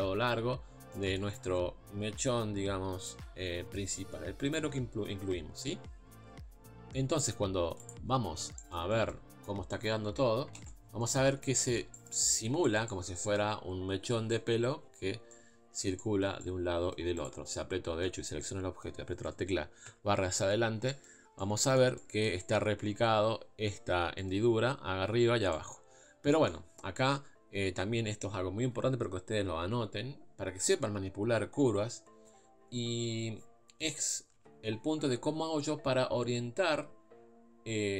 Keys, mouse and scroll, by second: 0.4-0.9 scroll up 1, 0.9-7.9 middle drag, 7.9-10.2 drag, 10.2 KP_Divide, 10.6 ctrl+space, 10.9 scroll down 1, 11.0 middle click, 11.4 scroll up 3, 11.6-17.2 shift+middle drag, 17.2 click, 17.6-19.9 middle drag, 19.9 KP_Divide, 20.9 middle click, 21.2 scroll up 1, 21.4-26.0 middle drag, 26.0-26.3 scroll down 2, 26.3-34.4 middle drag, 34.4 KP_Divide.